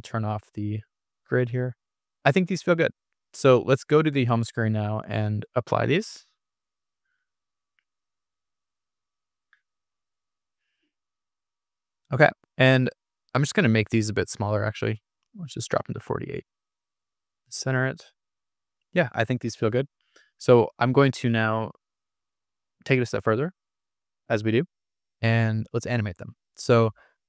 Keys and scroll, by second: 0.8 super+-, 15.5 4, 15.7 Return.